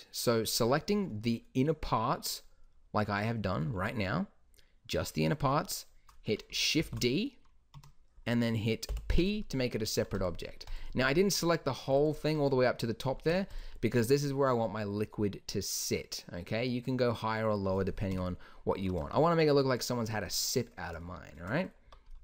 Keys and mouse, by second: 1.1 z, 3.8 z, 6.9 shift+d, 9.0 p, 9.9 Tab, 11.2 Tab, 13.4 Tab, 18.2 KP_1, 18.8-19.3 middle drag, 22.0 Tab.